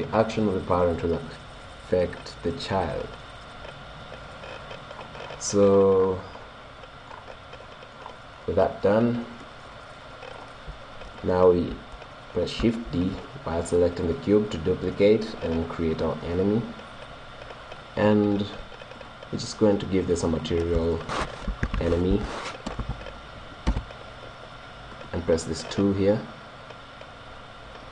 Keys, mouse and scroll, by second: 5.0-10.4 middle drag, 11.4-12.9 drag, 12.9 shift+d, 13.0 right click, 14.3 right click, 14.4 click, 15.3 middle click, 16.1-17.1 drag, 19.0-22.2 drag, 25.0-26.7 drag.